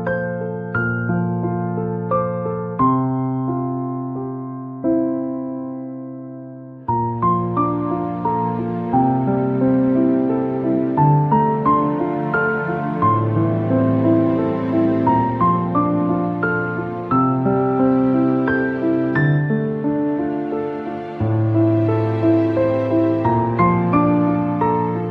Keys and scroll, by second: 3.5 ctrl+n, 13.6 5, 13.9 KP_0, 19.0 KP_3, 19.1 KP_0, 20.4 Return.